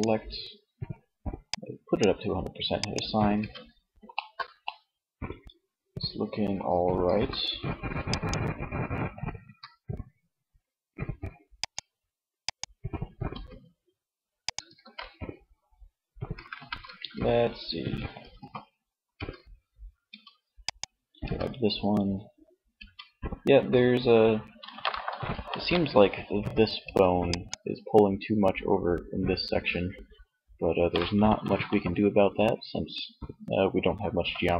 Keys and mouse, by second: 2.4 Tab, 6.2 alt+r, 8.4 r, 12.3 r, 13.9 ctrl+z, 15.5 a, 15.8 a, 17.6 alt+r, 18.2 Tab, 19.2 Tab, 20.4 Tab, 21.8 Tab, 25.5 Tab, 26.1 Tab, 34.0 Tab.